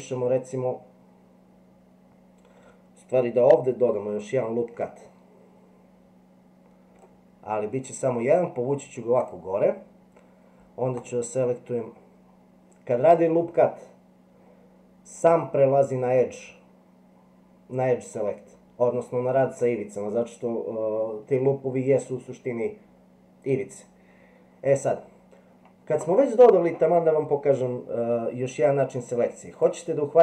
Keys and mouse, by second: 4.5 ctrl+r, 10.9 click.